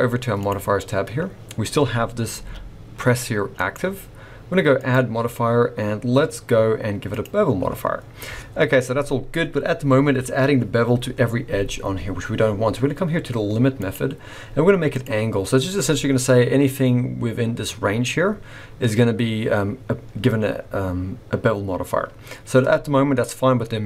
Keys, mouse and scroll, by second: 0.4 click, 2.3 g, 4.7 click, 7.9-11.0 scroll up 5, 13.7 click, 19.7-22.8 scroll up 1.